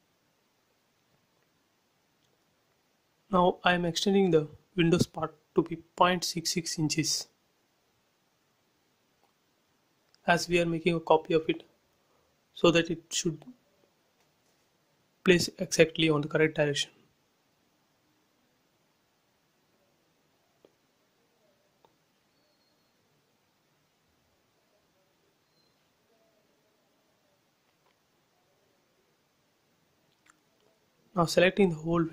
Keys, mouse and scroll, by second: 0.9-3.8 drag, 3.8 m, 4.0 click, 5.2 Right, 6.1-8.8 typing, 8.3 Return, 8.9-13.3 drag, 13.3 m, 13.5 click, 14.7 Right, 16.0-17.4 typing, 17.0 Return, 17.6 click, 18.1 scroll up 1, 19.7 click, 20.0 scroll down 1, 22.1-23.6 drag, 23.6 m, 23.9 click, 25.0 Right, 25.8-28.1 typing, 27.3 Return, 27.8 click, 28.4 scroll up 1, 28.8 shift+middle click, 29.3 click, 29.6 scroll up 1, 30.7 middle click, 31.8 shift+click.